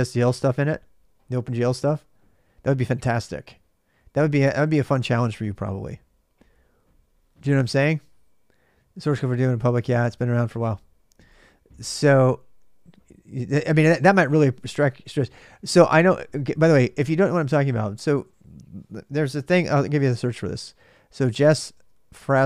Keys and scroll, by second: 18.8 ctrl+a, 21.0-22.4 typing.